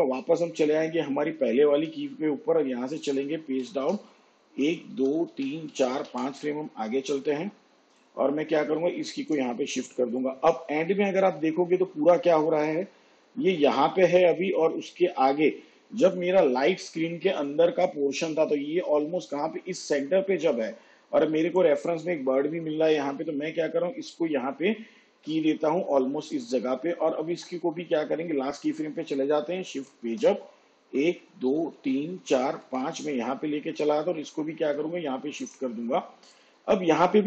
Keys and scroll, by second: 1.6 j, 3.4 shift+Page_Down, 4.4 ctrl+Right, 28.4 k, 29.6 shift+Page_Up, 30.7 ctrl+Left.